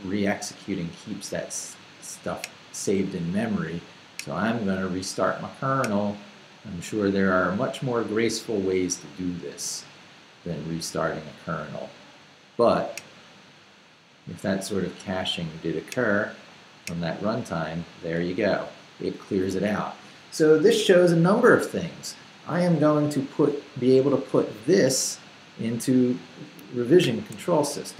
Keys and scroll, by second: 27.0 shift+;.